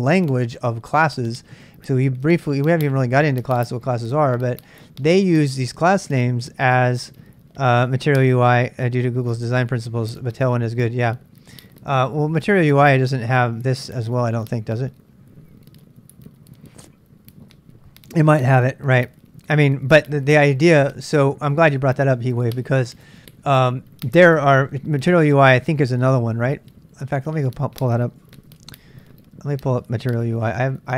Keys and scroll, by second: 28.5 super+Tab, 30.0-30.9 typing, 30.6 ctrl+[.